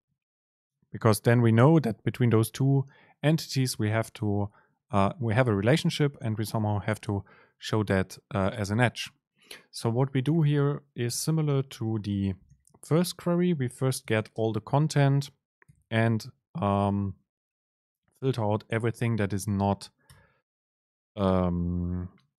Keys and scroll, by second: 11.8 super+space, 20.5 super+space.